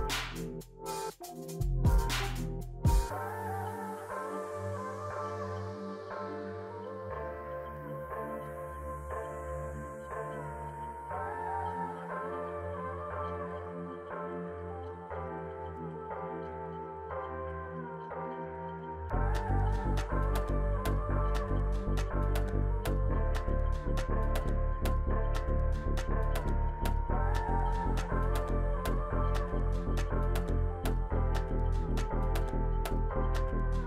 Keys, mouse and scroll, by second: 0.4-1.4 scroll up 3, 1.4 double click, 22.3 scroll down 1.